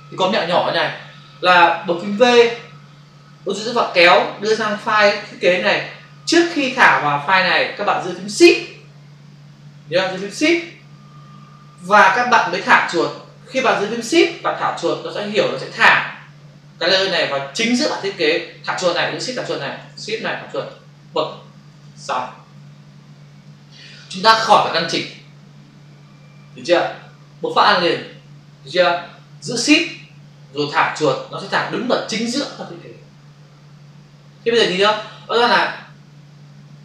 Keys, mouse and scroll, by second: 3.8 click.